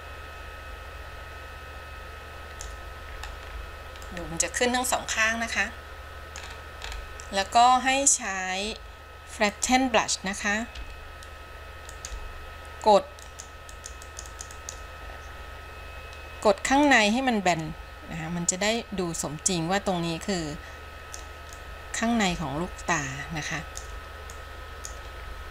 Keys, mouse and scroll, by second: 3.3-3.9 scroll down 8, 4.3-6.6 middle drag, 6.6-7.7 scroll up 6, 7.7 middle click, 8.6 scroll up 1, 9.6 click, 10.9 f, 13.4 click, 13.9 click, 14.3 click, 14.6 click, 14.7 click, 17.1-21.4 drag, 21.9-24.2 drag, 24.5 click, 25.4 scroll down 4.